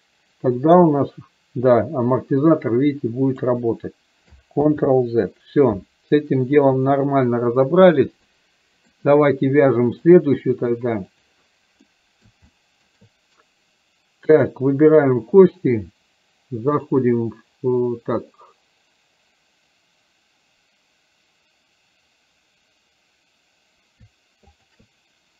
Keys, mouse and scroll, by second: 4.8 ctrl+z, 8.4-8.9 middle drag, 10.3 click, 11.9-12.3 middle drag, 12.6-13.1 shift+middle drag, 14.4 click, 16.9-23.9 drag, 24.7 shift+click.